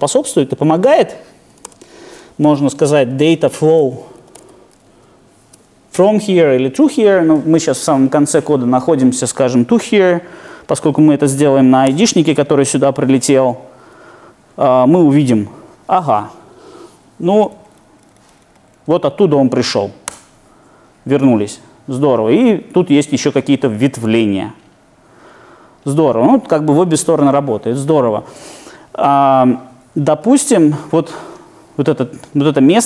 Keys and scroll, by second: 17.3 Down.